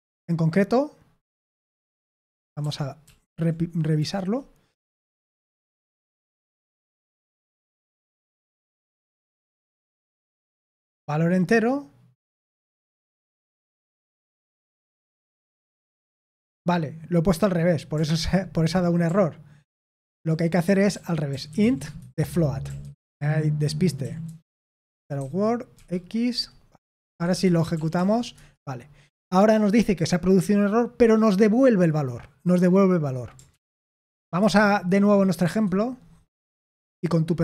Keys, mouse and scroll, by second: 2.5 ctrl+p, 3.0 ctrl+p, 3.9 Return, 5.5-8.1 typing, 9.5-10.4 typing, 14.8-15.3 typing, 19.4-25.7 typing, 26.7-27.8 typing, 27.9 ctrl+p, 28.3 Return, 33.4 ctrl+p, 33.8 ctrl+p, 34.3 Return.